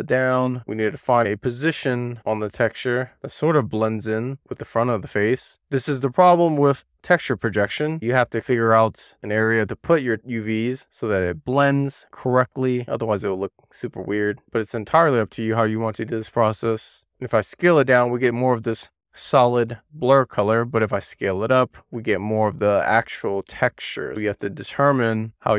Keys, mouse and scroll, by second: 0.0 click, 1.2 w, 1.7 click, 4.0 super+z, 4.7 super+z, 5.6-6.8 middle drag, 7.8-8.2 scroll up 1, 9.5 click, 11.8 super+z, 12.6 click, 14.7 e, 16.1 r, 16.9 click, 17.1 r, 17.6 click, 18.4 w, 18.6 click, 19.3 middle click, 20.2 e, 20.6 r, 21.3 click, 25.2 super+z, 25.4 super+z.